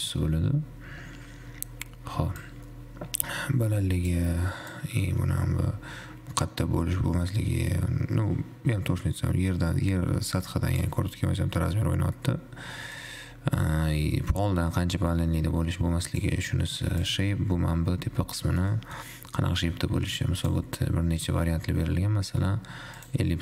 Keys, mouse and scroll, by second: 2.6-7.9 drag, 13.2-16.5 drag, 17.4-18.6 drag, 18.6-20.6 middle drag, 20.6-23.4 drag.